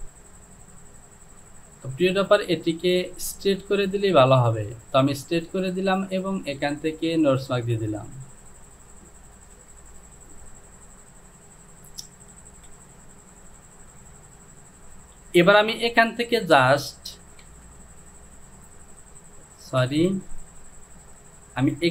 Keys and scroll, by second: 17.6 Down, 18.6 Return, 19.9 ctrl+z.